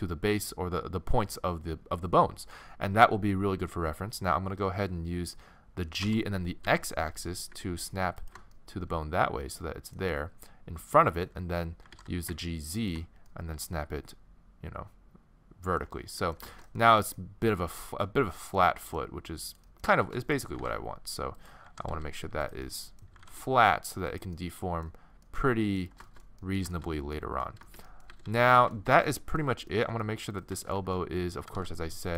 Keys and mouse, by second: 6.0 g, 8.5 middle click, 11.8 g, 16.1-21.0 middle drag, 20.5 g, 21.6 g, 23.1 g, 28.1 a, 28.2 a, 30.4-32.1 middle drag, 31.4 g.